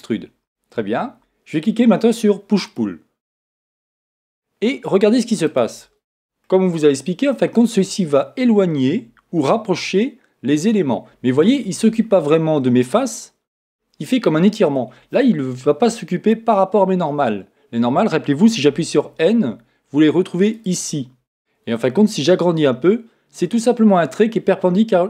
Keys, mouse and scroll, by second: 2.7-4.6 drag, 6.4-8.3 middle drag, 12.1-14.1 middle drag, 18.7 n, 20.5-23.7 drag, 24.1-25.0 middle drag.